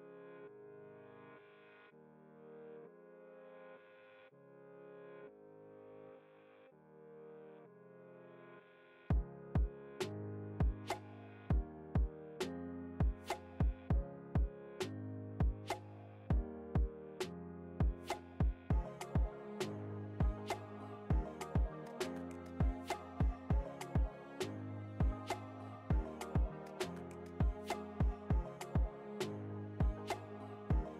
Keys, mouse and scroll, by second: 0.2 Return, 1.0-2.7 drag, 2.7 ctrl+t, 3.3-11.1 alt+shift+drag, 11.1 Return, 12.0 click, 12.8 ctrl+t, 13.7-15.2 alt+shift+drag, 15.2 Return, 17.9 click, 20.8 click, 21.8 ctrl+t, 22.5-24.7 alt+shift+drag, 24.7 ctrl+z, 25.4-28.8 drag, 28.8 Return, 29.4 alt+scroll down 1, 30.2 alt+scroll up 1.